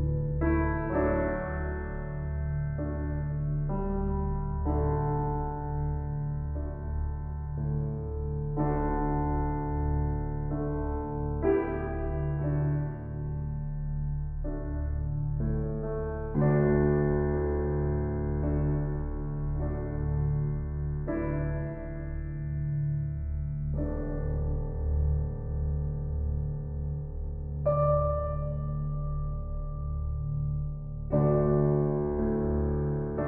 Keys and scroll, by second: 6.4 [, 23.0 Up, 29.3 ctrl+t.